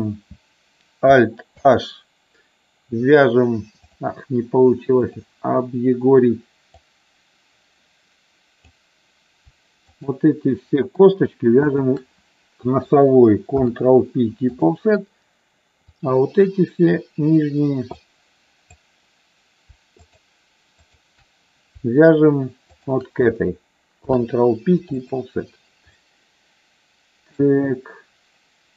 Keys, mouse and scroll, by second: 1.4 alt+h, 3.9 click, 5.1 click, 6.7-8.7 drag, 9.9 shift+click, 11.7 shift+click, 13.6 ctrl+p, 16.0 click, 17.9 click, 20.9 shift+click, 24.0 ctrl+p, 26.1-27.3 middle drag.